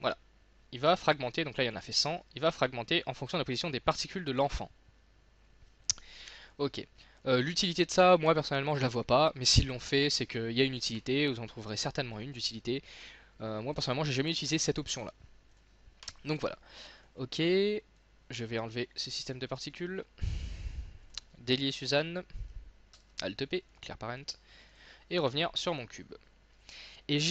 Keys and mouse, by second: 2.2 z, 3.3 middle click, 6.3 x, 7.8-9.2 drag, 9.4 z, 10.4 click, 15.0 middle click, 15.6-17.0 right drag, 17.0-19.8 drag, 23.0 alt+p, 24.2 click, 25.2 click, 25.6-27.3 middle drag.